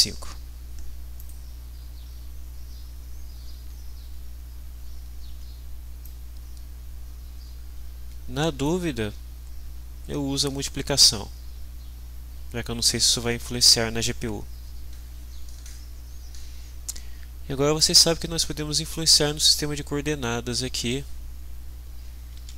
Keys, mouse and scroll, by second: 1.2 click, 4.7 ctrl+s, 6.0-8.8 drag, 17.7-19.2 drag, 22.4 alt+Tab.